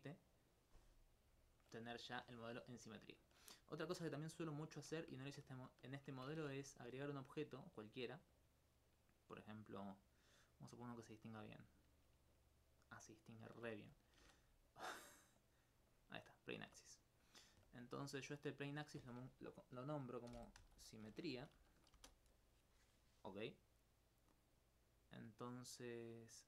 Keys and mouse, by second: 1.5 alt+click, 2.1 alt+click, 2.8 alt+click, 4.8 middle click, 6.4 shift+a, 8.1 click, 11.0 click, 11.6 alt+click, 13.8 x, 14.0 click, 15.4 click, 15.9 alt+click, 17.1 alt+click, 17.5 alt+click, 20.3 shift+s, 20.6 shift+m, 20.8 shift+e, 24.1 right click.